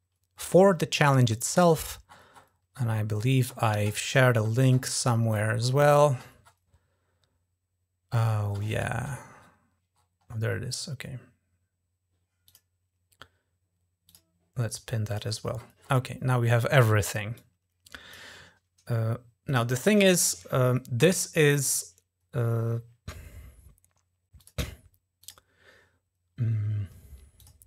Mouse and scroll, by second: 1.5-4.5 scroll down 13, 4.5 scroll up 2, 4.8-6.6 scroll down 10, 8.3 scroll down 1, 8.4-9.3 scroll down 6, 9.8 scroll up 2, 12.3 click, 13.9 click, 14.9 click, 15.4-16.2 scroll down 4, 17.2 click, 19.3 click, 24.3 click, 25.1 click, 27.2 click.